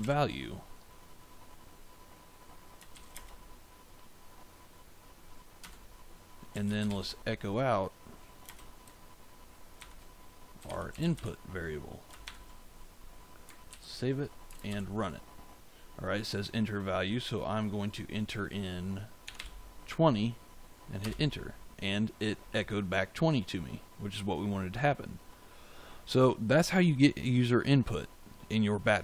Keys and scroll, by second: 0.0-0.4 typing, 2.9 shift+;, 3.1 space, 5.5 Return, 6.2-7.3 typing, 8.4 space, 9.7-12.2 typing, 13.6 ctrl+s, 18.9-19.8 typing, 20.9 Return.